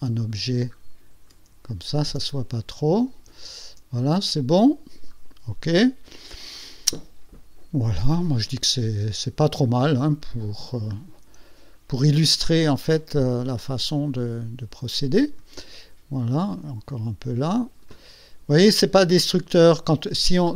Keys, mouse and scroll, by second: 0.4 shift+middle click, 1.8-2.5 ctrl+shift+scroll down 5, 2.5 ctrl+click, 3.5 ctrl+scroll down 2, 4.1-5.2 ctrl+drag, 5.2 scroll up 1, 7.4 click, 8.3-8.6 ctrl+scroll up 1, 9.3 ctrl+scroll down 2, 10.2 ctrl+click, 11.6 ctrl+scroll up 2, 13.0-15.7 ctrl+drag, 16.4-18.2 drag.